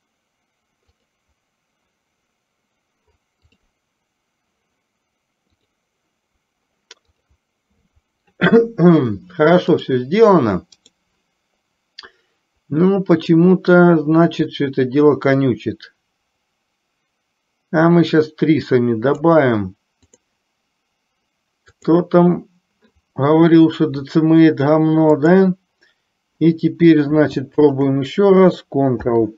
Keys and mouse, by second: 0.9 click, 7.3 click, 10.9-13.7 drag, 15.4-19.9 drag, 20.3-22.4 drag, 25.4-26.6 drag, 27.8 shift+click, 29.1 ctrl+p.